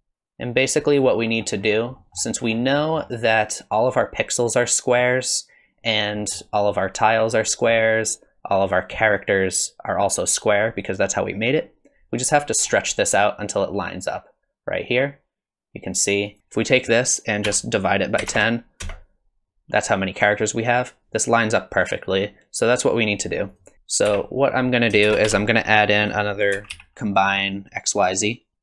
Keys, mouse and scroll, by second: 0.5 click, 1.3-1.8 scroll up 8, 2.0 middle click, 2.4 scroll down 4, 2.7 middle click, 3.3 scroll down 2, 6.2 middle click, 7.4 middle click, 12.6-13.1 scroll up 3, 13.4 shift+click, 23.5 click, 23.7 scroll up 8, 24.1 g, 24.7 click, 25.0 shift+a, 28.5 Down.